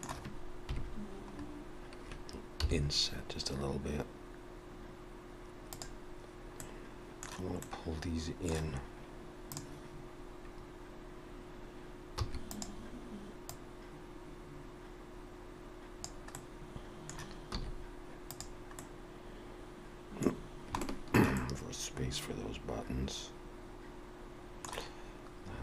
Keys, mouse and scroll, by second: 0.7 KP_3, 1.4-1.9 scroll up 3, 2.5 i, 6.6 middle click, 7.6 middle click, 9.5 click, 12.2 e, 13.5 click, 16.4 middle click, 17.6 z, 18.8 middle click, 20.4-20.7 scroll down 3, 20.8 shift+middle click, 21.4 middle click.